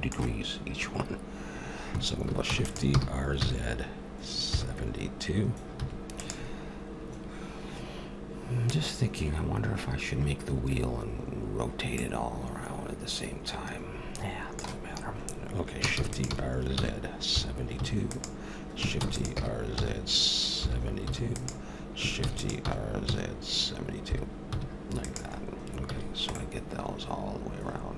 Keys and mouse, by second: 2.4 shift+d, 2.9 r, 11.9-13.7 middle drag, 15.9 shift+d, 16.2 r, 19.0 shift+d, 19.3 r, 22.2 shift+d, 22.6 r, 25.9 a, 26.0-27.3 middle drag.